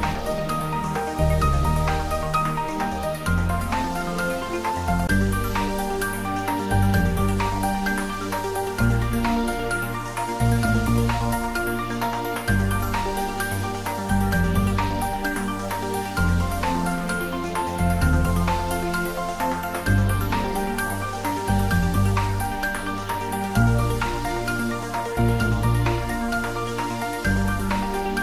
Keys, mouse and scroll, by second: 4.5 scroll down 1, 7.7-8.5 scroll up 1, 16.0-17.5 scroll up 1, 17.5-18.8 drag, 25.6-27.1 drag.